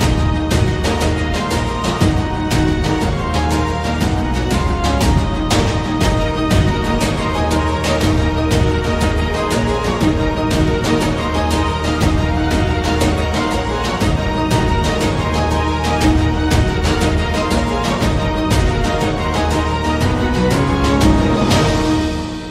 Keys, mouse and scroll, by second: 1.1 Tab, 1.3 middle click, 2.1 a, 2.3 a, 2.8 middle click, 3.8 shift+middle click, 6.9 middle click, 7.4 click, 7.9 Tab, 8.7 click, 8.7 3, 9.2 shift+d, 10.1 p, 10.7 Tab, 11.0 click, 11.4 right click, 12.8 ctrl+a, 14.6 middle click, 16.0 Tab, 16.4 a, 16.6 a, 17.0 ctrl+r, 19.4 shift+middle click.